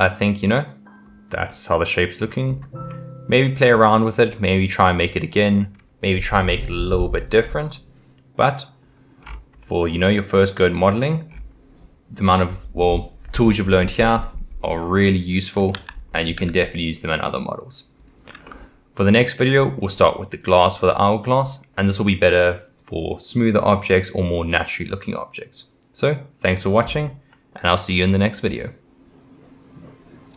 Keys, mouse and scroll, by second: 0.2-2.5 middle drag, 2.5 click, 2.9-5.7 middle drag, 5.7-6.2 scroll down 1, 6.2-9.2 middle drag, 9.2-9.6 scroll down 5, 9.6-11.3 middle drag, 11.3-14.4 scroll up 5, 14.7 click, 15.7 g, 18.0 click, 18.5-21.6 middle drag, 27.3-30.3 middle drag.